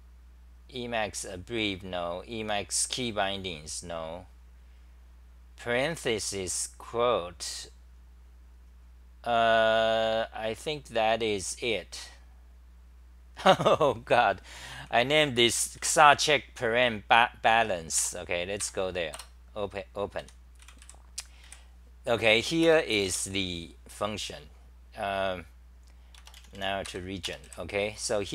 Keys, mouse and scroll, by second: 0.1-1.3 scroll down 15, 2.9-5.0 scroll down 9, 3.1 click, 7.0 click, 8.1 click, 8.8-11.3 scroll down 1, 12.0 click, 13.8 click, 14.6 c, 14.7-15.8 scroll, 14.7 c, 15.8 1, 18.0 Tab, 18.6 ctrl+g, 19.2 Return, 20.0-21.4 typing, 26.8 ctrl+g.